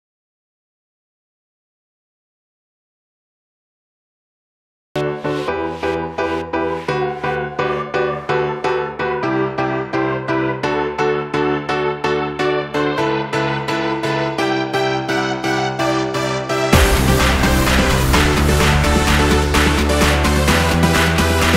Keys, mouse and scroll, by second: 1.1 right click, 4.5 right click, 7.8 click, 19.1 shift+middle click.